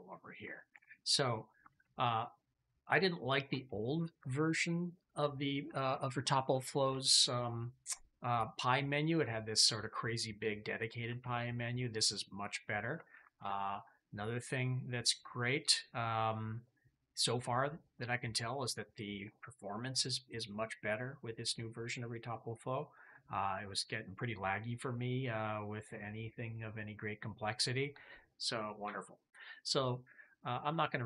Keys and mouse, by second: 1.6 alt+q, 11.1 alt+q, 17.0 click, 29.7-31.0 middle drag.